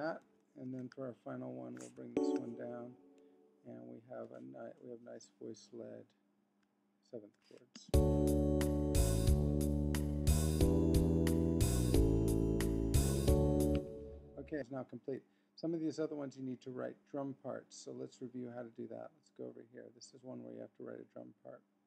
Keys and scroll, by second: 0.2 Right, 1.0 super+Up, 2.1 shift+Down.